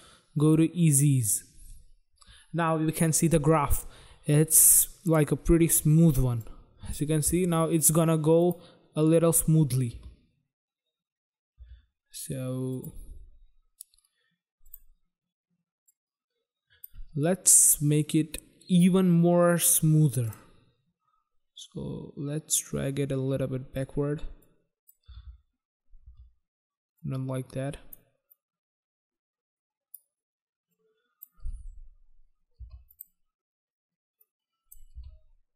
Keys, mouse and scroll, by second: 0.4 click, 0.6 click, 2.8 click, 3.1 click, 6.4 click, 8.4 click, 8.5 click, 9.9 space, 11.6 space, 12.8 click, 12.9 click, 13.6 scroll down 1, 13.9-14.3 scroll up 2, 14.7 click, 14.7 click, 15.9 click, 20.3 click, 20.4 click, 21.7 click, 24.4 click, 25.1 space, 26.1 space, 27.0 click, 28.2 click, 30.6 click, 31.5 space, 32.6 space, 32.9 click, 33.0 click, 34.3 click, 35.0 space.